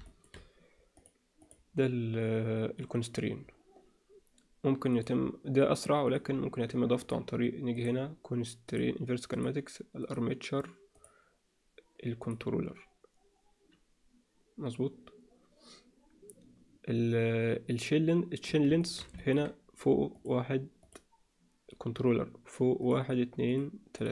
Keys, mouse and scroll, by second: 0.1 alt+shift+middle click, 1.4 click, 5.0 click, 6.1 click, 7.0 click, 7.8-8.7 drag, 9.3 click, 11.0-12.3 drag, 18.8 shift+middle drag, 19.2 ctrl+middle click, 20.1 click, 20.8 click, 22.8 drag.